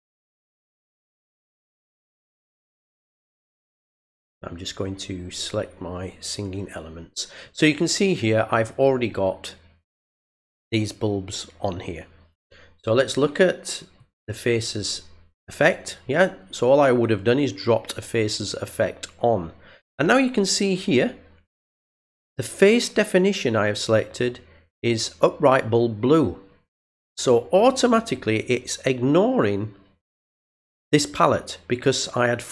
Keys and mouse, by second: 4.0 click, 6.3 click, 13.9 click.